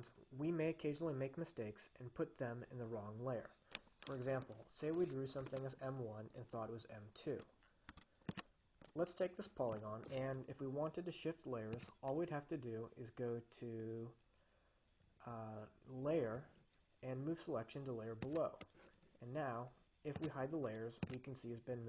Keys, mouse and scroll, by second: 8.3 s, 8.6 click, 11.9 click, 18.5-19.2 drag, 20.9 click.